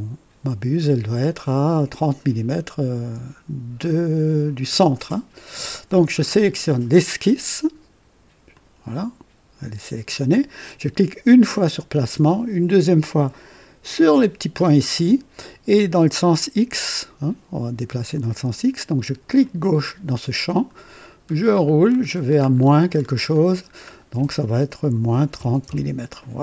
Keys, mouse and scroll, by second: 6.5 click, 8.4 click, 11.4 click, 13.8 click, 19.3 click, 20.5-23.9 scroll down 17, 24.9 KP_Subtract, 25.3 KP_3, 25.6 KP_0.